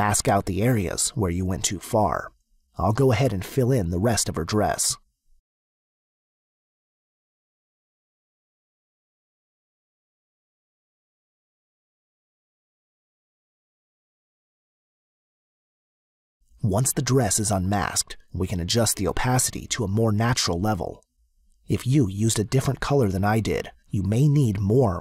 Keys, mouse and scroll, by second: 1.3 click, 3.1 click, 5.6 click, 6.4 click, 7.1 click, 7.6 click, 8.4 click, 11.3 click, 13.2 click, 20.6 click.